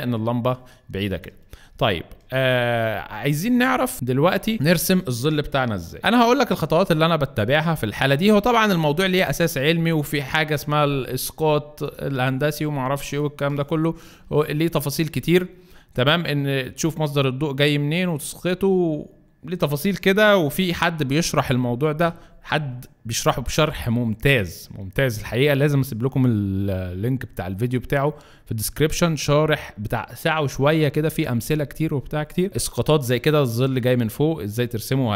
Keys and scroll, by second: 3.9 space.